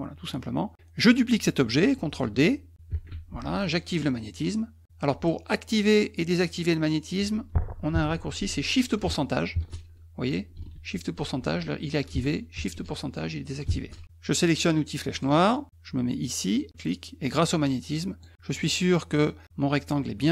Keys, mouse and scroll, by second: 2.9 ctrl+d, 9.5 shift+ù, 10.7 shift+ù, 11.2 shift+ù, 12.6 shift+ù, 13.7 shift+ù, 15.1 click, 16.7-18.2 drag.